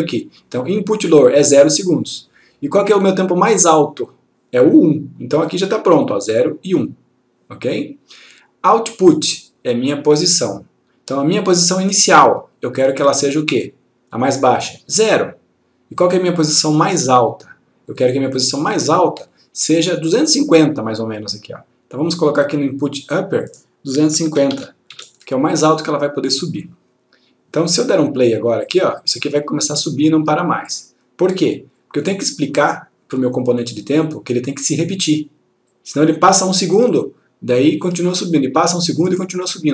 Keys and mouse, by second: 1.6 click, 5.6 click, 14.7 click, 19.3-20.2 click, 23.2 click, 24.3 2, 25.5 click, 28.8 click, 31.9 click, 35.8-36.4 click.